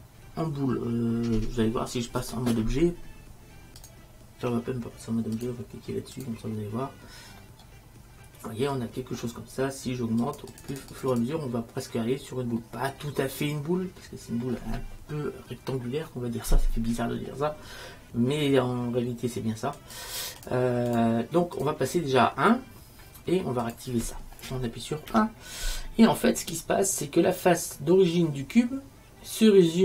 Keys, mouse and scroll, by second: 5.0-8.3 drag, 10.3-13.2 drag, 13.6-14.7 middle drag, 19.9 click, 25.2 KP_1, 28.7 middle click.